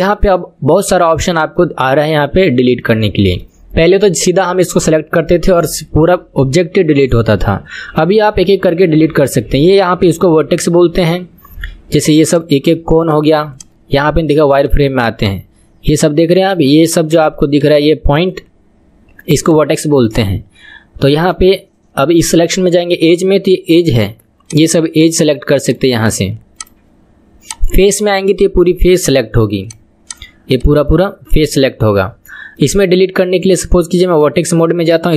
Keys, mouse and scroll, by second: 0.3-1.9 middle drag, 1.9-2.7 scroll up 1, 2.7 scroll up 1, 2.8-5.9 middle drag, 12.3 click, 13.0 click, 13.5 click, 14.2 click, 14.6 click, 15.2 click, 15.7-16.4 scroll up 2, 16.4 click, 17.0 click, 17.5 click, 18.1 click, 18.8-19.3 scroll down 2, 19.4 click, 20.1 click, 21.2 click, 23.9 click, 24.4 click, 24.9 drag, 25.2 click, 25.6 click, 26.0 click, 26.5 click, 27.4 click, 29.1 click, 29.6 click, 30.0 click, 30.5 click, 30.8-33.3 middle drag, 33.3-34.1 scroll down 1, 34.1 click.